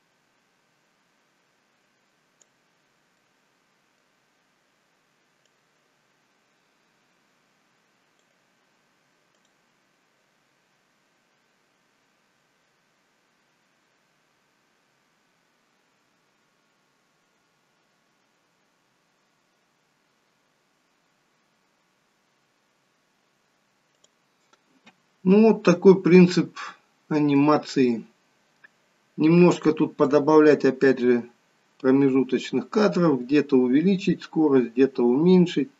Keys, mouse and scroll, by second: 2.9 scroll down 2, 3.2 middle click, 4.1-4.5 scroll up 1, 5.5 click, 5.5-6.1 scroll up 1, 9.4 click, 24.0 click, 24.8-25.5 scroll up 1, 25.7 middle click, 25.7-26.4 scroll up 1, 28.6-30.2 scroll down 1, 30.2 click.